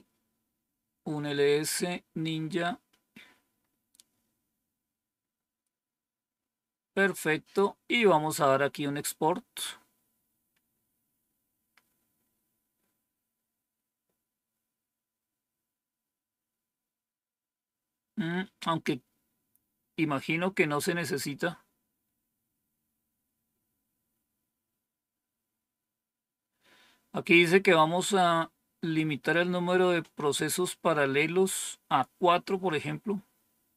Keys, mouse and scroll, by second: 2.8-3.5 scroll down 1, 3.5 scroll down 1, 25.5-26.2 scroll down 1.